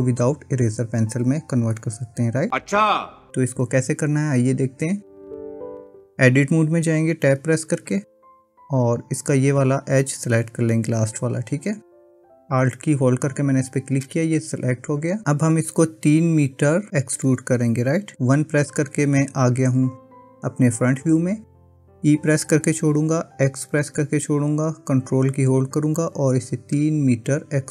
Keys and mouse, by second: 7.5 Tab, 17.2 KP_1, 22.9 e.